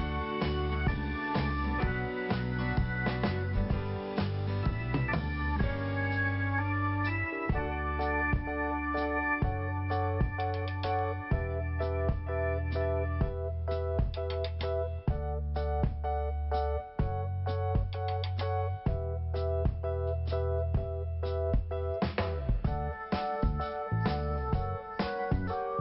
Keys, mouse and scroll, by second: 0.6 click, 2.1 click, 2.9 click, 5.5 scroll down 1, 7.0 p, 8.2 click, 9.2 scroll down 1, 10.1-10.6 scroll up 1, 11.1 click, 14.6 scroll down 1, 15.7-16.3 scroll up 1, 16.5 click, 16.5 click, 17.5 click, 21.0 scroll down 2, 22.2 scroll up 1, 22.9 scroll up 1, 23.9 click.